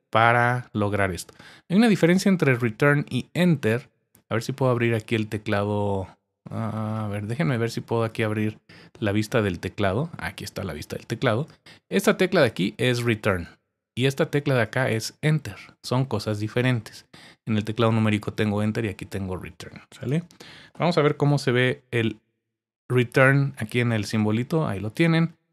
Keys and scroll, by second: 12.0 Return, 12.4 Return, 12.9 Return, 13.3 Return, 14.6 Return, 21.2 Return.